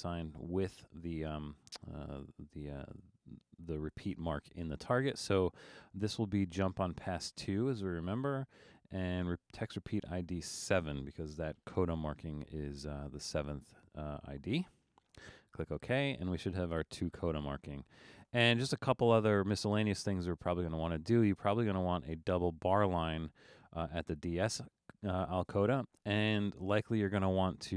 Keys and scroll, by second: 7.9 2, 11.3 7.